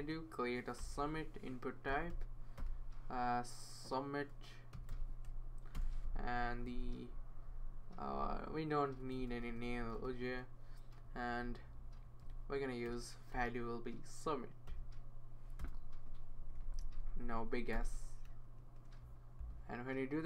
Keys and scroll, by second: 0.8 Return, 1.6-2.6 typing, 4.5-5.2 typing, 5.7 Return, 6.2 Right, 6.8 Right, 12.8-13.3 typing, 14.4-15.2 typing, 15.6 Return, 16.4 Left, 16.7 Left, 16.8 Left, 17.7 BackSpace, 18.6 s.